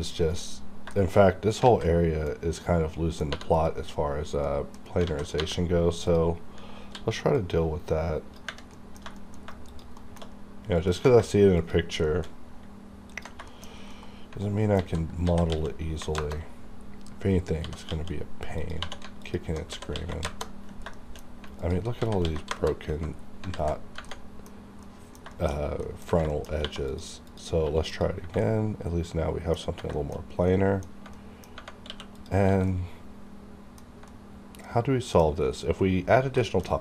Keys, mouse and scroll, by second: 0.1 right click, 0.5-0.8 scroll down 1, 0.9 shift+middle click, 1.6 alt+z, 1.9 alt+middle click, 3.3 3, 3.5 click, 4.3 scroll down 1, 4.4 middle click, 5.0 a, 5.4 3, 6.1 click, 6.8 c, 7.3-8.7 drag, 8.7 middle click, 9.7 shift+click, 10.0 shift+middle click, 10.3-10.7 scroll down 1, 10.8 ctrl+click, 12.0 shift+middle click, 13.1 ctrl+click, 13.5 shift+middle click, 14.7 alt+z, 15.3 s, 15.4 x, 15.9 KP_0, 16.2 KP_Enter, 16.8-17.6 scroll up 1, 17.6-20.1 typing, 18.6 click, 19.2 alt+click, 20.2 KP_Enter, 20.9 shift+middle click, 21.5 alt+click, 22.0-22.3 typing, 22.4 KP_Enter, 23.1 scroll down 1, 23.5 alt+z, 24.1 middle click, 24.1 middle click, 24.5-24.8 scroll up 1, 24.8 middle click, 25.5-25.8 shift+scroll up 2, 25.8 middle click, 26.3 shift+middle click, 26.4 shift+scroll up 1, 26.6 2, 26.9 click, 27.6 q, 27.8 click, 28.4 middle click, 29.9 shift+middle click, 30.2 scroll up 1, 30.5 middle click, 31.7 scroll up 1, 31.8 q, 32.1 click, 32.7 middle click, 34.1 middle click, 35.3-35.8 scroll up 1, 36.4 shift+middle click, 36.6 shift+scroll down 2.